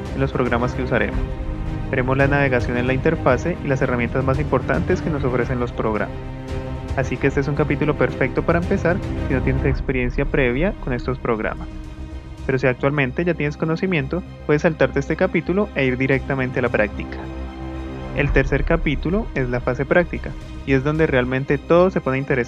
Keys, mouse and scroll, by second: 7.1 click.